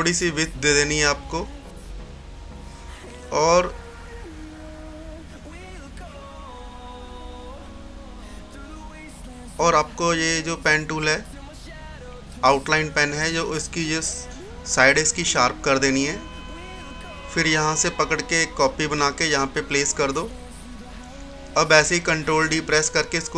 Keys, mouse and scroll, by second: 0.6-1.0 scroll up 1, 2.1-5.4 drag, 5.4 click, 9.3 click, 12.5-20.2 drag, 20.2 right click, 20.8 scroll down 1, 22.9 ctrl+d.